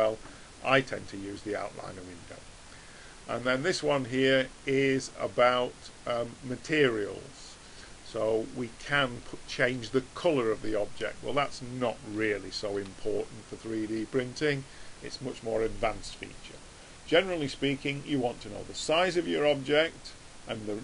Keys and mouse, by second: 3.9 click, 8.8-11.2 middle drag, 17.3 click.